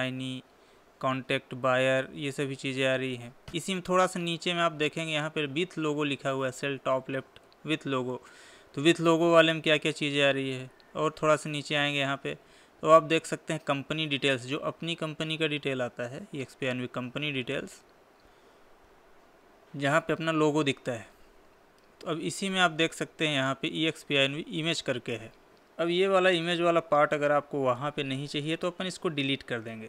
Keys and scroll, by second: 3.5 Down.